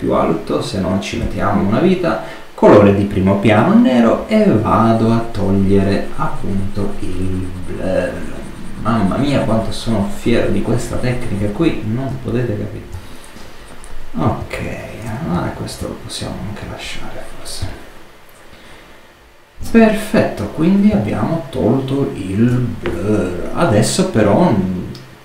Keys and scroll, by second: 15.2 super+space, 15.5 super+z.